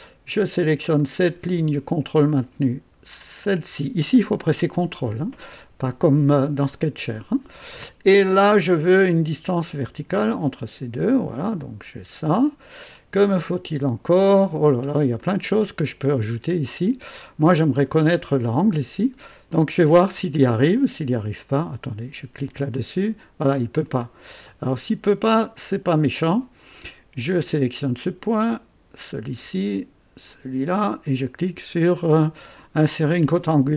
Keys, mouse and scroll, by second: 0.9 click, 3.4 ctrl+click, 10.1 click, 11.4-13.1 drag, 14.5 scroll down 2, 15.2-17.3 right drag, 17.5 scroll up 2, 18.0 right click, 19.7 click, 21.1 ctrl+click, 22.7 click, 23.8 click, 24.3 click, 27.3 click, 29.0 ctrl+click, 30.3 ctrl+click.